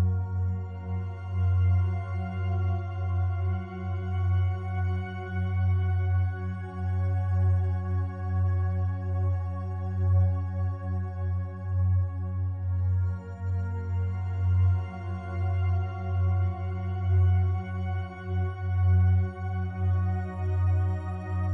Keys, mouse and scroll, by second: 1.4 ctrl+b, 2.5 right click, 5.4 a, 5.6 a, 6.6 right click, 7.8 2, 8.8 right click, 9.7 shift+right click, 14.2 ctrl+b, 15.8-16.6 scroll up 1, 20.9 click, 21.3 a.